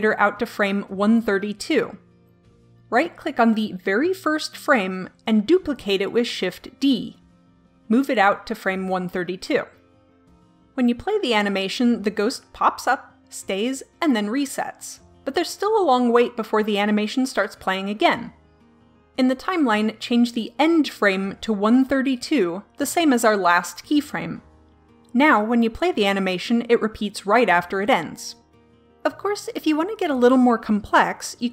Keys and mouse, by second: 5.0 right click, 5.2 shift+d, 11.5-12.7 drag, 19.6 click, 20.6-27.7 drag.